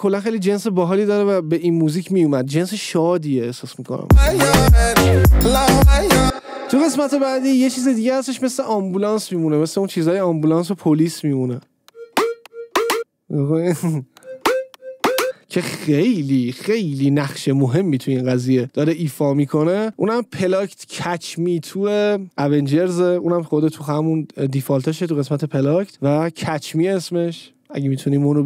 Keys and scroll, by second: 4.3 space, 6.4 space, 12.0 space, 16.0 space.